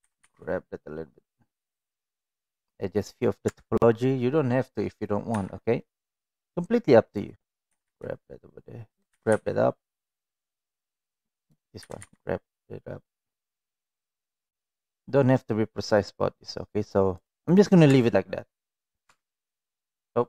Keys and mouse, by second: 0.0 g, 3.4 Tab, 5.3 1, 6.1-7.1 drag, 7.6 g, 9.1 g, 11.2 click, 11.8 g, 17.8 Tab, 18.7-19.0 middle drag, 19.1 Tab, 19.6 middle click.